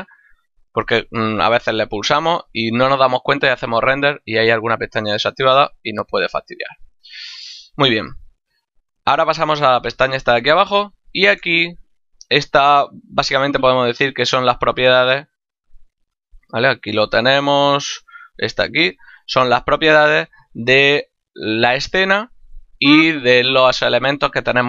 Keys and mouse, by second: 7.5 click, 15.1 click.